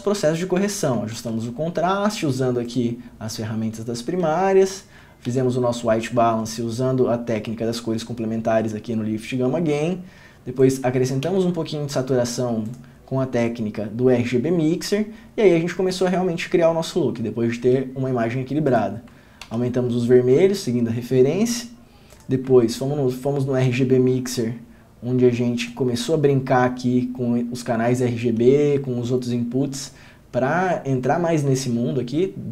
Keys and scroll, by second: 1.4 ctrl+d, 5.5 ctrl+d, 19.6 ctrl+d, 23.9 ctrl+d.